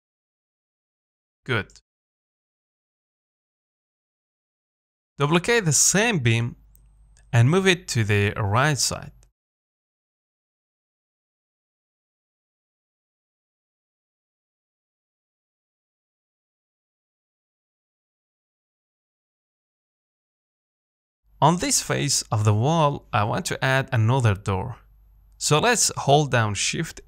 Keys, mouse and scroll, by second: 0.3-3.3 middle drag, 5.7 shift+d, 10.1 middle click, 10.4-10.9 scroll up 3, 10.9-12.0 middle drag, 12.0-12.6 scroll down 2, 12.6-15.3 middle drag, 15.3-15.7 scroll up 2, 15.7 shift+middle click, 16.0-16.4 scroll down 3, 16.4 middle click, 16.9 scroll down 1, 17.1-18.9 middle drag, 18.9 click, 19.2 scroll down 3, 19.4 shift+middle click, 19.7-20.0 scroll up 1, 20.0-21.4 middle drag, 21.4 scroll up 1, 21.6-23.6 shift+middle drag, 23.6-24.0 scroll up 2, 24.0-25.9 middle drag, 25.9 shift+right click.